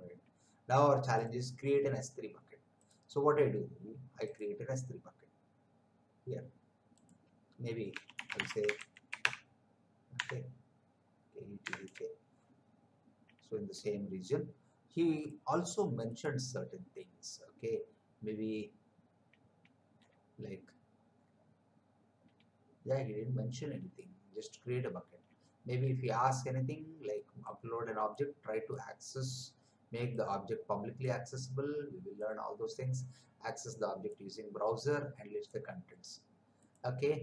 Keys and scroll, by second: 7.9-10.1 typing, 11.6 BackSpace, 11.8 a.